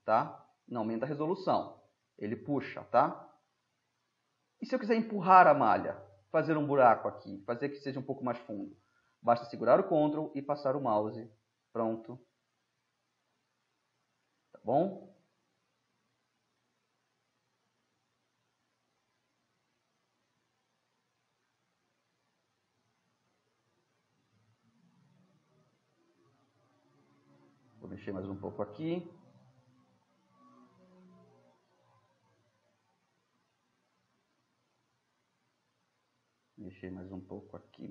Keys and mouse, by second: 0.5-2.2 drag, 2.2-3.1 middle drag, 4.0-9.3 middle drag, 10.3-20.8 drag, 20.8-24.6 middle drag, 24.6 click, 26.5-28.1 middle drag, 28.2 middle click, 28.4-28.8 middle drag, 29.7 ], 30.6-34.4 drag, 34.4-35.5 middle drag, 34.4 click, 36.1-37.9 middle drag.